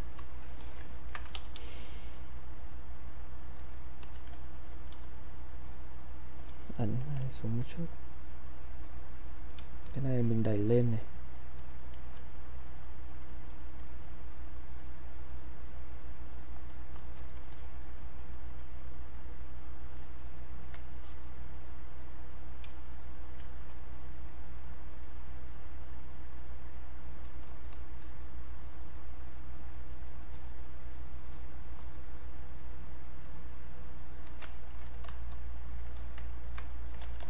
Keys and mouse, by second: 0.6 alt+click, 1.0 ctrl+right click, 1.4 ctrl+e, 2.3-4.0 ctrl+drag, 4.0 ctrl+q, 4.5 alt+click, 5.0 space, 5.3 click, 5.5 space, 6.8 click, 7.5 alt+click, 7.7 click, 9.6 space, 10.1 click, 10.1 space, 10.4 click, 11.6 space, 11.9 click, 12.1 space, 12.4 click, 21.7 click, 22.7 space, 23.1 click, 23.2 space, 24.0 click, 28.0 click, 34.6 ctrl+right click, 34.9 click, 36.0 alt+click, 36.3 ctrl+right click, 36.7 click, 37.0 ctrl+z.